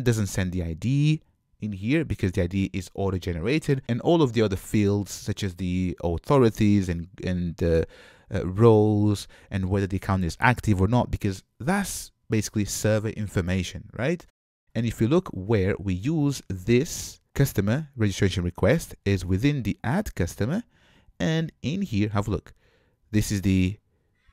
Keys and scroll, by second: 15.9 ctrl+Tab, 20.0 super+b.